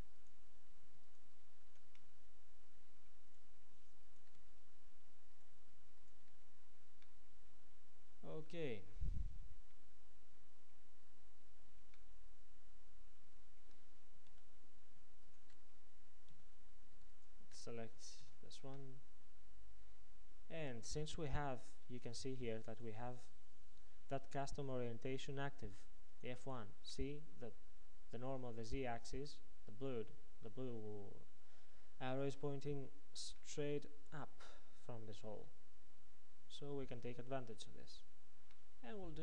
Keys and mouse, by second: 1.6 f, 2.1-3.3 middle drag, 4.5 f, 6.4 f, 7.1 middle click, 8.2 middle click, 9.3 middle click, 10.0 middle click, 12.4 middle click, 14.3 a, 16.3 a, 18.3 KP_Decimal, 20.0 middle click, 33.4-35.3 middle drag, 37.5-39.1 middle drag.